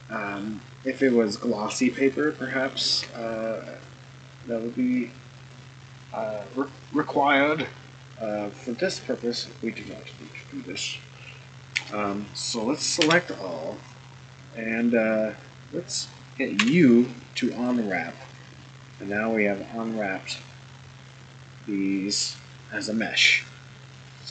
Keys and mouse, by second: 2.4-2.9 shift+middle drag, 5.4 click, 11.8 Tab, 13.0 a, 13.9-15.4 right drag, 16.6 u.